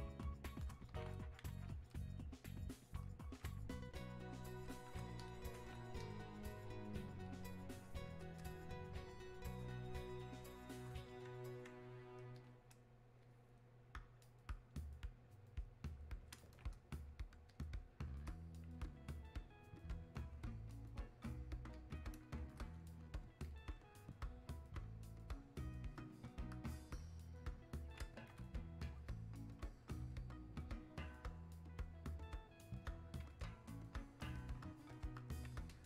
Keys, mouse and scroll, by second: 1.9-23.4 drag, 26.0-35.8 drag.